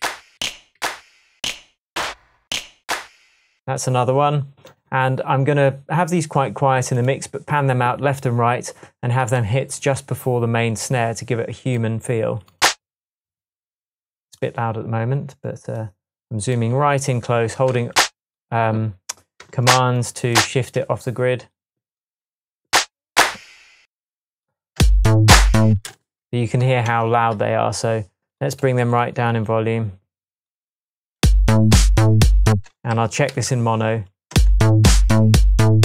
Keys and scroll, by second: 0.0 Up, 0.8 Down, 1.4 Up, 1.9 Up, 2.5 Down, 24.8 space, 25.6 space, 25.7 space, 26.7 space, 26.9 Tab, 31.2 space, 32.5 space, 33.3 m, 34.3 alt+space.